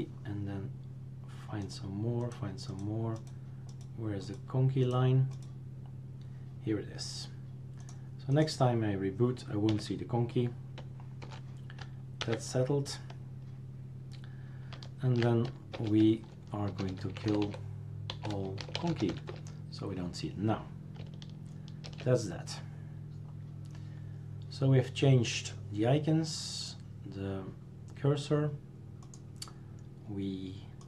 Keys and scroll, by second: 9.7 Left, 11.2 typing, 15.7 super+Return, 16.5-19.6 typing, 21.9 shift+super+q.